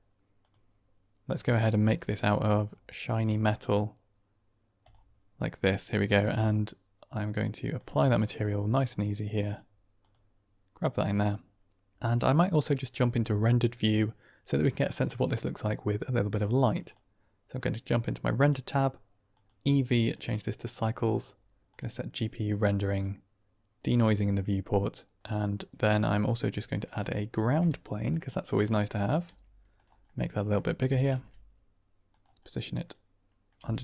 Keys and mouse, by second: 8.6 click, 9.3-11.4 drag, 19.4-20.1 drag, 21.1-21.7 drag, 22.8 click, 23.7 click, 26.9 shift+click, 27.2 shift+a, 29.1 s, 29.6 click, 29.9-30.4 middle drag, 30.7 g, 31.0 shift+z, 32.0 click, 32.3-33.4 middle drag, 33.5 g.